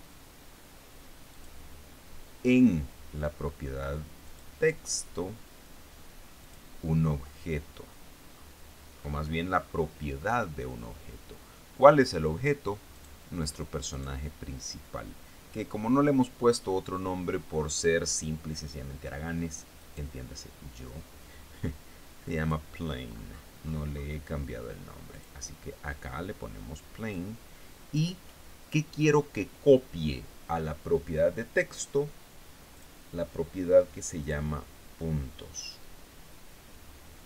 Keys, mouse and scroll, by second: 1.8 click, 4.7 click, 6.9 click, 8.3-9.1 scroll down 3, 9.4-9.9 scroll up 2, 10.0-10.4 scroll up 1, 13.4 right click, 14.4 right click, 20.2 right click, 22.8 click, 23.5 scroll up 2, 23.8-24.7 scroll down 6, 25.6 click, 27.6 click, 33.2 click, 34.7 click.